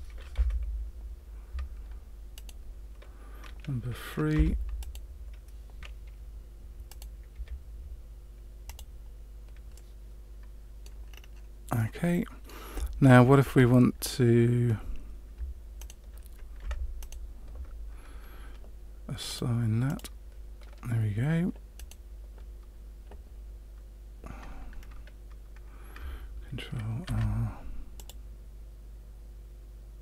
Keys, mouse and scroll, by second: 2.3 right click, 4.3 3, 4.8 right click, 6.8 right click, 7.3 Delete, 9.7 middle click, 11.1-11.7 scroll down 3, 11.7 middle click, 13.0-14.2 shift+scroll down 2, 15.7 alt+right click, 16.9 alt+shift+right click, 19.2 click, 19.8 click, 21.7 right click, 24.7-25.9 scroll up 1, 27.0 ctrl+r.